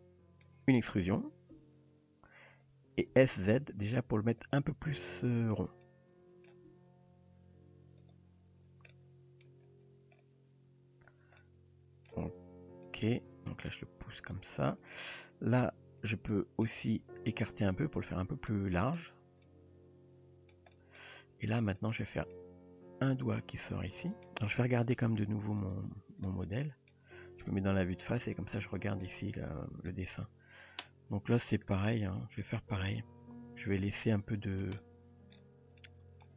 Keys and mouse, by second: 1.7 e, 3.1 s, 4.9 r, 5.8 middle click, 6.7 g, 8.9-9.5 middle drag, 11.4-12.1 middle drag, 12.5 r, 13.1 g, 15.2-15.6 middle drag, 16.1 click, 16.3 middle click, 17.0 g, 18.5-19.0 middle drag, 19.1 Tab, 19.4-20.6 middle drag, 20.8 middle drag, 21.2 Tab, 21.9 drag, 22.3-24.3 middle drag, 25.1 KP_3, 26.3-26.9 shift+middle drag, 27.4 KP_1, 28.2-29.1 shift+middle drag, 29.9 shift+middle drag, 35.9 shift+middle click.